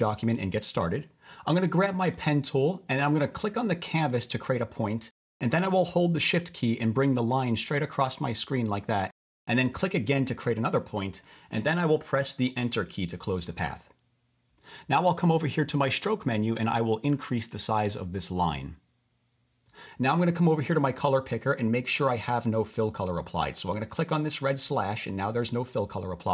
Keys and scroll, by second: 12.6 Return.